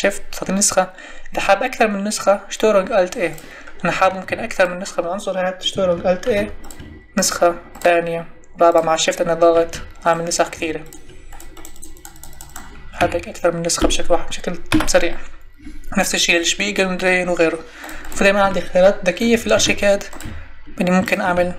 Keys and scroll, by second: 4.0 Escape, 6.2 ctrl+alt+e, 13.0 Escape, 14.7 Delete, 19.5 ctrl+alt+d.